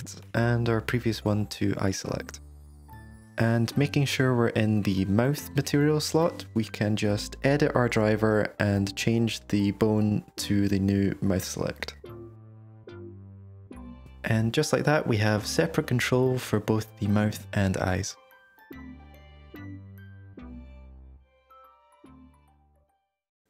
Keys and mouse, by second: 1.7 F2, 2.9 middle click, 3.1 Tab, 3.7 shift+middle click, 4.8-6.9 drag, 8.3-12.9 drag, 14.0 Tab, 14.4 drag, 14.7 g, 19.1 click, 19.3 g, 20.6 g.